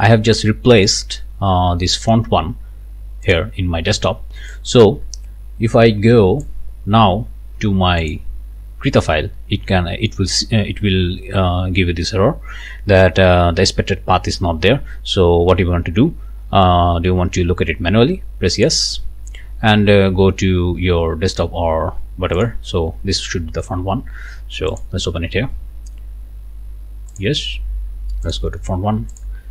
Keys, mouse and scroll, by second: 0.9 click, 2.0 click, 3.2 click, 4.5-6.6 drag, 8.1 click, 18.6 click, 21.3 click, 22.4 click, 24.7 click, 27.1 click, 28.3 click, 29.1 click.